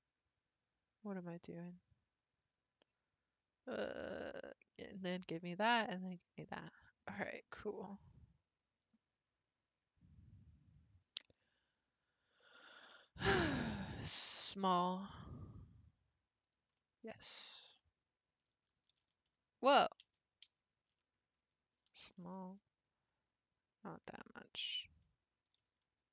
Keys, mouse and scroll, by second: 11.9-12.6 scroll down 5, 12.6 middle click, 13.4 a, 14.0 s, 16.8 middle click, 17.5-17.8 scroll up 2, 17.8-19.1 middle drag, 19.1 ctrl+x, 20.1 ctrl+z, 20.5 ctrl+z, 21.0-22.0 ctrl+scroll up 2, 22.0 s, 25.0 middle click, 25.6 s.